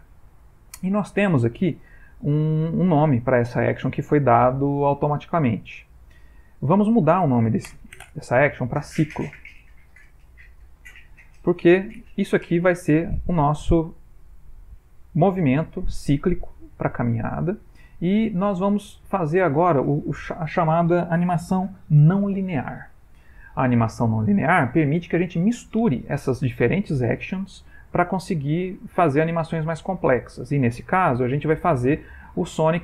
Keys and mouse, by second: 6.8 click, 13.4 click.